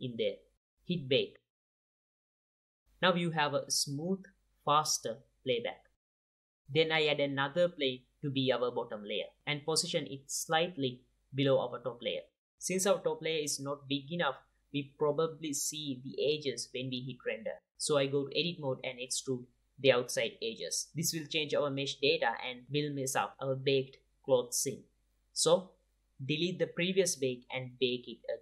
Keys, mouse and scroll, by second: 1.4 click, 3.6 space, 7.5 space, 7.8 shift+a, 8.5-9.0 middle drag, 9.5-12.2 typing, 10.1 alt+a, 11.3-11.7 drag, 12.4 middle click, 14.8-16.7 drag, 15.5 Tab, 16.7 middle click, 16.9-19.6 drag, 19.5 e, 20.9 Tab, 22.4-26.5 drag, 26.6 click.